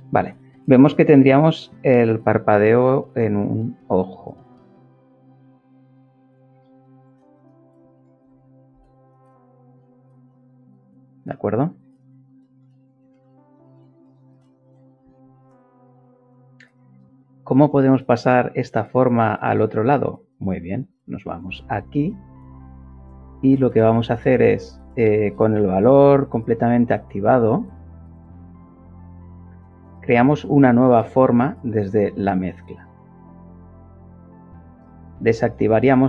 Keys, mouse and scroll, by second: 5.4-6.4 shift+middle drag, 6.4 shift+middle click, 7.1 Tab, 8.9 Tab, 11.7-12.8 shift+middle drag, 28.1 ctrl+shift+click, 31.6 click, 34.9 click, 35.8 click.